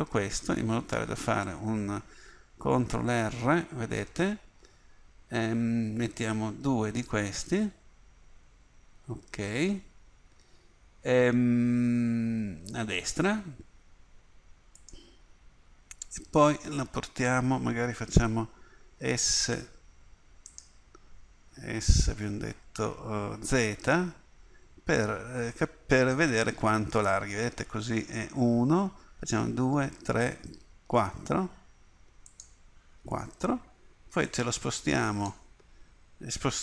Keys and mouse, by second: 2.9 ctrl+r, 21.9 s, 34.3-36.1 drag.